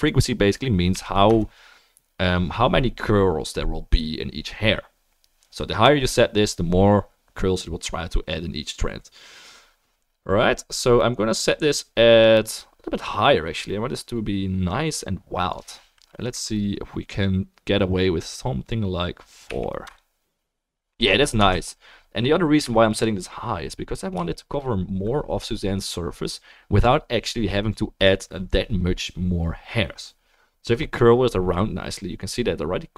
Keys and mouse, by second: 21.0-24.1 drag, 21.0-24.1 middle drag, 21.0-24.1 right drag, 22.0 ctrl+s, 28.6-32.9 middle drag.